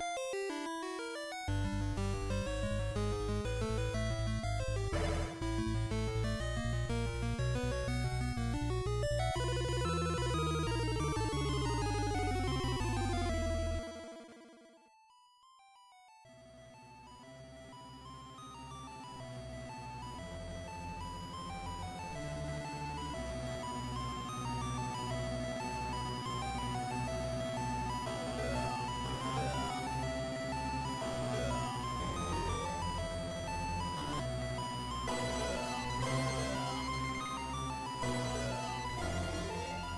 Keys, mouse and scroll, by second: 0.8 alt+shift+right click, 6.3 scroll up 2, 14.5 click, 16.5 click, 18.4 click, 22.3 click, 25.0 click, 32.7 F7, 34.7-35.4 scroll down 1, 38.1-38.6 scroll down 4.